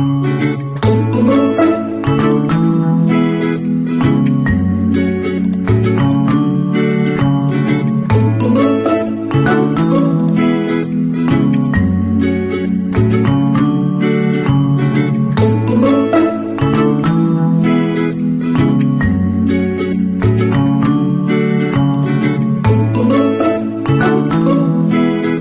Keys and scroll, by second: 10.0 Delete.